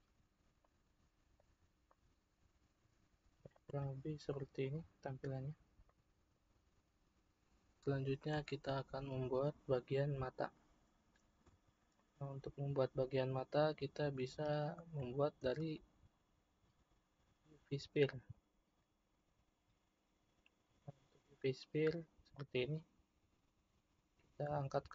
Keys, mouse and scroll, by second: 3.6 click, 4.4-5.1 middle drag, 5.1-5.9 scroll up 2, 5.9-7.8 middle drag, 11.9-14.9 shift+middle drag, 15.4 shift+a, 22.3 click.